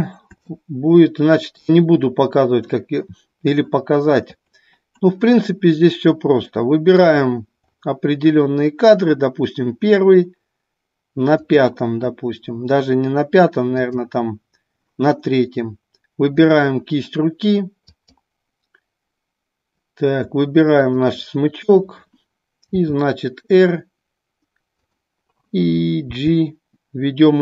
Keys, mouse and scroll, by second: 0.5-1.7 middle drag, 6.6 middle click, 11.5 drag, 13.8 click, 16.4-17.6 drag, 18.1-19.3 drag, 22.7 r, 25.0 click.